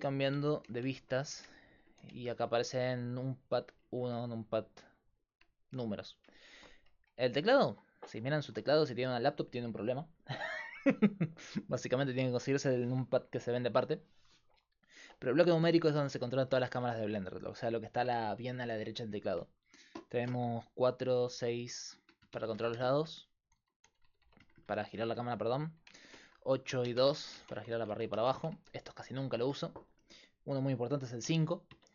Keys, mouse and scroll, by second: 0.3-2.5 typing, 3.5-5.8 typing, 21.0-25.2 typing, 26.5-29.3 typing, 31.2 KP_5, 31.7 KP_5.